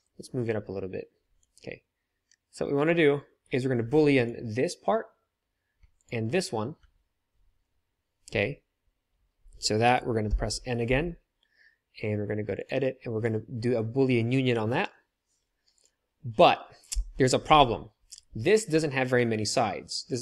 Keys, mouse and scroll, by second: 10.3 n, 10.9 n, 12.5 click, 16.9 n.